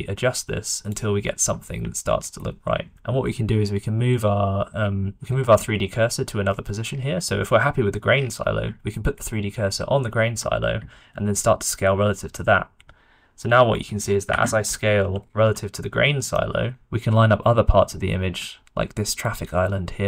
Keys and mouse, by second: 0.9-2.5 middle drag, 5.1 d, 8.7 shift+middle click, 9.4 shift+middle click, 11.2 s, 15.0 d, 15.2 click, 15.3 d, 16.3-16.7 shift+middle drag, 16.8 s.